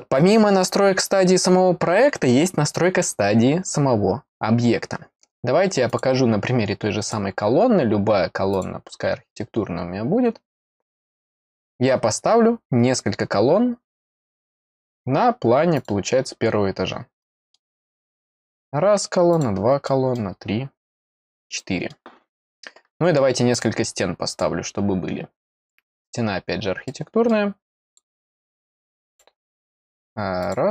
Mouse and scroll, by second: 5.8 click, 7.0 click, 8.5 click, 14.8-15.7 scroll down 2, 15.7 click, 17.2 middle click, 18.2 click, 19.3 click, 19.8 middle click, 21.0 click, 21.5 middle click, 23.5 click, 24.2 click, 25.5 click, 26.8 middle click, 27.8 click, 29.0 click, 30.4 click.